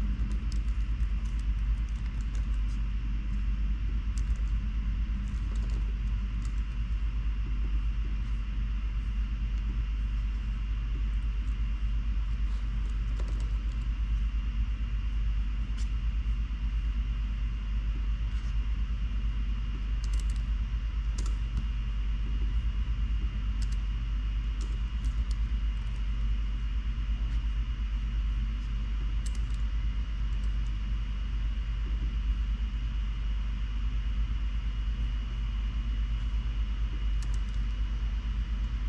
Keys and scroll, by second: 0.0-1.2 typing, 6.6-7.4 typing, 11.5 super+s, 12.9 super+p, 13.1-14.4 typing, 20.0-21.9 typing, 23.6-24.3 typing, 24.8 Tab, 25.5 alt+Up, 26.0 super+s, 29.5 Return, 30.5 Tab, 37.4 Return.